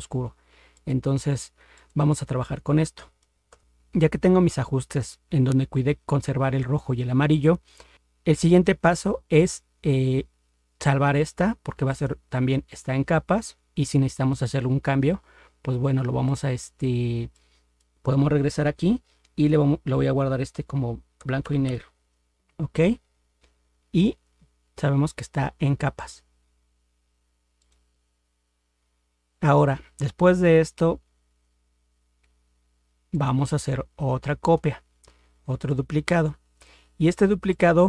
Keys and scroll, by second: 3.5 ctrl+0.